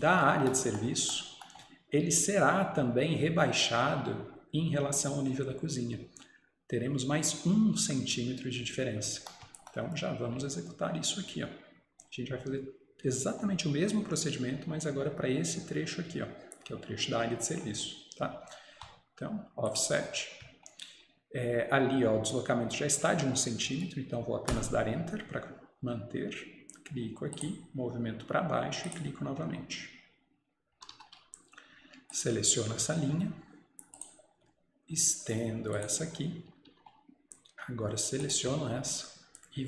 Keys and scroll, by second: 24.6 Return, 30.8 Escape, 31.0 Escape, 36.6 Escape, 36.7 Escape.